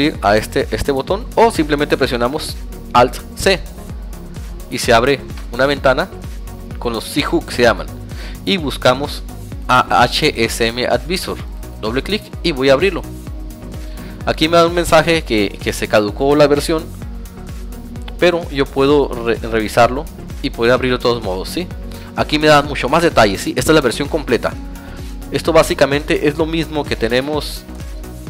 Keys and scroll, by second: 2.2 alt+c, 15.6 alt+c, 23.5 alt+Tab.